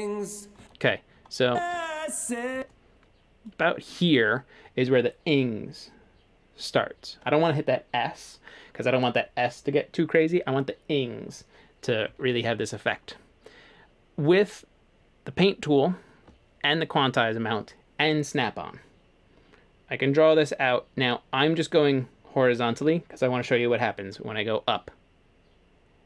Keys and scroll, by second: 1.5 space.